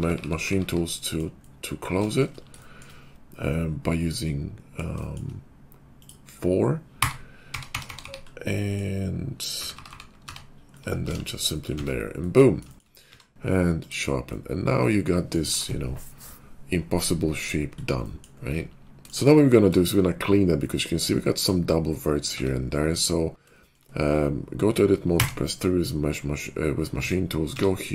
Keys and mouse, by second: 0.0-0.5 typing, 6.9-7.9 typing, 8.8-11.7 middle drag, 9.5 4, 9.6 4, 9.8 4, 10.2 4, 11.0 alt+x, 11.7 Tab, 13.0 q, 14.7-21.4 middle drag, 22.2 Tab, 25.1 3, 26.9 Tab, 26.9-27.9 middle drag, 27.5 q.